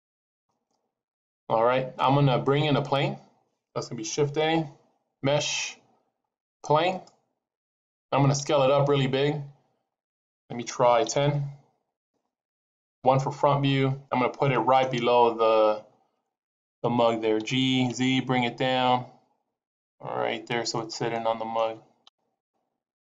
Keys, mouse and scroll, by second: 0.0 click, 4.3 shift+a, 8.3 s, 12.9 KP_1, 13.6-14.3 scroll up 3, 14.3 shift+middle click, 15.0 scroll up 1, 17.3 g, 21.1 middle click, 22.0 KP_1, 22.3 KP_Decimal, 22.9-23.0 scroll up 15.